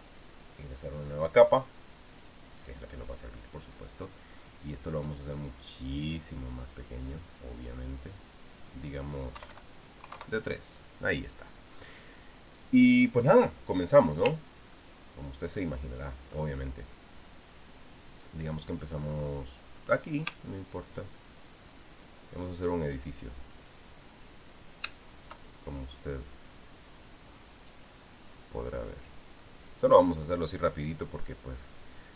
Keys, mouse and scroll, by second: 0.7 click, 3.0 click, 5.8 click, 6.3-9.3 drag, 10.1 Delete, 10.8 3, 11.4 Return, 15.2-15.7 ctrl+scroll up 3, 15.9 ctrl+scroll down 2, 16.0-16.5 ctrl+scroll up 2, 16.5 ctrl+scroll down 2, 20.9 shift+click, 24.5 shift+click, 30.2 shift+click.